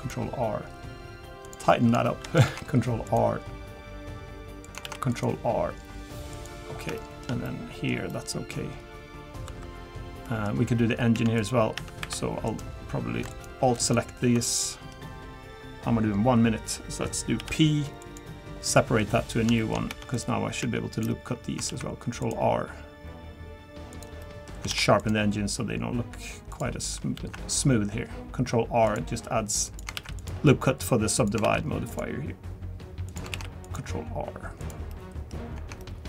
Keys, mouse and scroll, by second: 1.7 middle click, 2.0 shift+middle click, 2.4 ctrl+r, 4.8 ctrl+r, 6.6 scroll down 2, 7.0 shift+middle click, 7.4 middle click, 8.6 scroll up 2, 9.4 scroll up 1, 9.4 2, 10.0 scroll down 1, 10.2 middle click, 10.8-11.2 scroll up 2, 11.2 Tab, 11.4 click, 11.8 Tab, 12.0 3, 12.5 click, 13.3 alt+click, 13.8 alt+click, 14.5 middle click, 17.4 p, 18.7 middle click, 19.2 scroll up 1, 19.6 shift+middle click, 19.9 Tab, 20.1 click, 20.6 Tab, 20.9 click, 21.7 ctrl+r, 24.2 middle click, 24.7 ctrl+r, 27.1 ctrl+r, 31.5 ctrl+r, 34.9 middle click, 35.8 middle click.